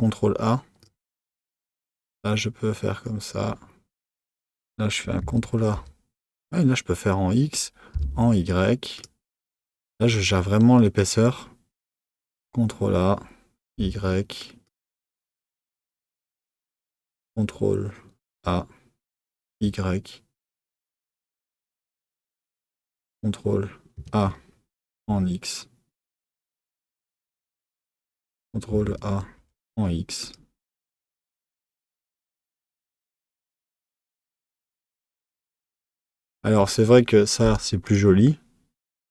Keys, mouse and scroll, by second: 4.1 click, 5.2 a, 10.8 click, 12.3 a, 16.0 click, 18.2 a, 23.9 a, 27.7 click, 28.7 a, 33.4 Tab, 37.4 click, 37.9 click.